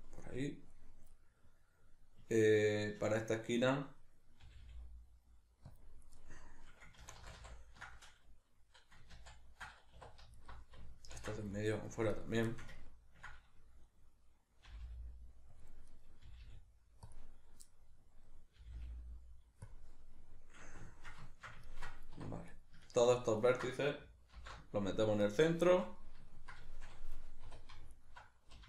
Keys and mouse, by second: 0.3-3.4 middle drag, 3.4 right click, 4.4 g, 5.8 click, 6.2-10.4 middle drag, 7.0 ctrl+z, 10.0 2, 10.4 alt+right click, 11.1 ctrl+x, 11.5 middle click, 12.1 right click, 12.5-15.6 ctrl+shift+middle drag, 14.7 g, 15.6 click, 15.9 right click, 16.3 g, 17.1 click, 17.7-22.5 middle drag, 18.6 g, 19.8 click, 22.2 1, 22.5 right click, 22.8 ctrl+right click, 23.1 ctrl+right click, 23.4 ctrl+right click, 24.4 alt+m, 25.7-28.0 shift+middle drag, 27.5 2, 28.2 alt+right click.